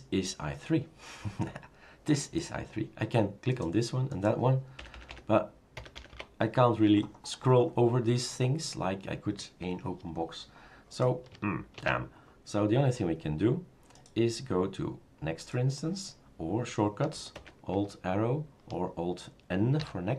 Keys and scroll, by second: 5.0-6.1 typing, 7.2 typing, 11.8 shift+super+q, 17.4 alt+Right, 19.8 alt+n.